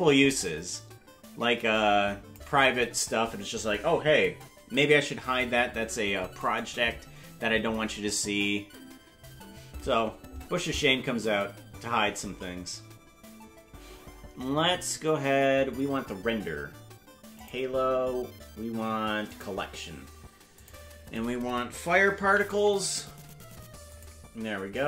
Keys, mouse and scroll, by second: 17.3-19.5 drag, 20.5-24.2 drag.